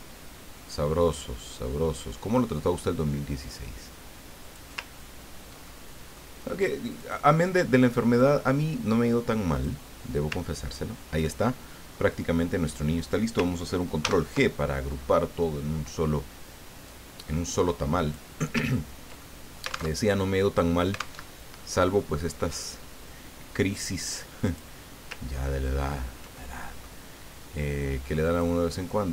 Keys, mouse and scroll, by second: 5.1 ctrl+scroll down 1, 6.0 ctrl+click, 6.1 middle click, 7.0 click, 8.1-10.0 drag, 10.7-11.1 ctrl+scroll down 2, 11.4 ctrl+middle click, 14.0 ctrl+g, 16.8-18.5 drag, 18.7-19.2 ctrl+scroll up 2, 19.3 ctrl+middle click, 20.1 ctrl+alt+Tab, 21.2 alt+Tab, 24.4 click, 25.4-26.2 ctrl+scroll up 4, 26.5 ctrl+click, 28.3 click.